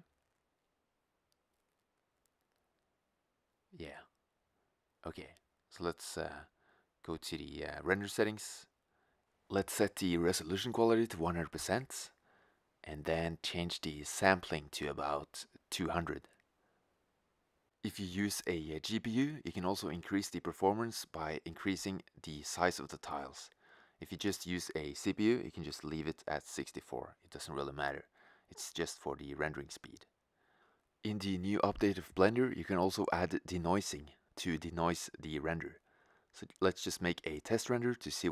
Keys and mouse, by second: 8.0-13.1 drag, 13.1-14.2 middle drag, 17.4 0, 18.5-19.6 middle drag, 19.8 middle click, 20.0-21.4 middle drag, 21.4-23.8 drag, 24.5 click, 24.6 0, 26.3-27.9 drag, 27.5 0, 28.0 click, 29.9-37.5 drag.